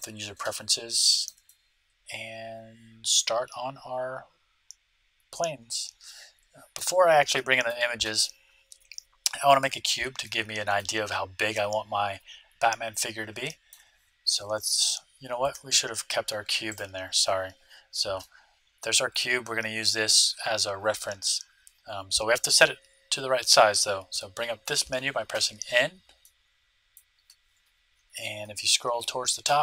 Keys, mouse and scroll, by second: 0.9-3.2 middle drag, 5.6-9.1 middle drag, 10.2-11.9 middle drag, 13.4-15.4 middle drag, 15.4 shift+a, 18.1-20.0 middle drag, 24.1 n, 26.2-27.9 middle drag, 27.9-29.6 scroll up 1.